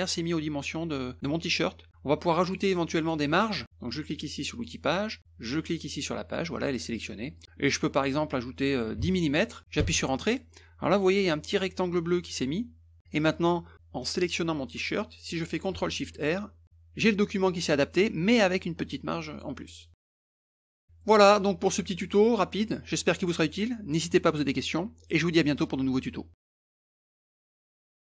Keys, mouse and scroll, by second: 1.2 click, 2.4 click, 3.0 click, 4.5 click, 5.5 click, 7.3 click, 9.8 Return, 13.1 click, 19.3 click, 21.0 middle click.